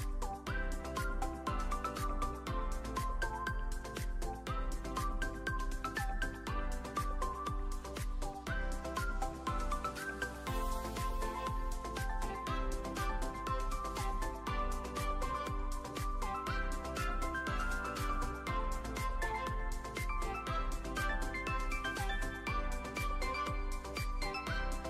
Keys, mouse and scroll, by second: 1.5-2.0 alt+middle drag, 2.4 shift+middle click, 3.4 click, 4.5 click, 5.6 alt+middle drag, 6.4 click, 7.4 s, 7.5 x, 8.1 click, 8.3 s, 8.5 z, 9.1 drag, 9.4 click, 10.9 ctrl+s, 14.2 click, 15.0-15.9 drag, 16.8 click, 19.2-20.1 drag, 21.7 ctrl+s.